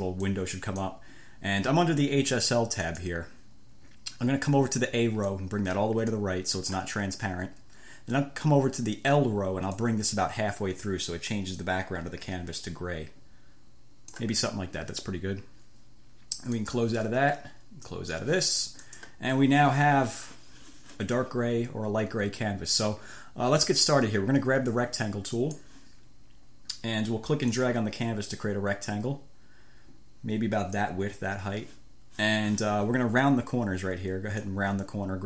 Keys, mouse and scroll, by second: 0.6 click, 3.1 click, 5.5-7.2 drag, 10.1-14.7 drag, 16.8 click, 18.1 click, 19.1 click, 25.6 click, 27.8-31.3 drag, 34.7-35.2 drag.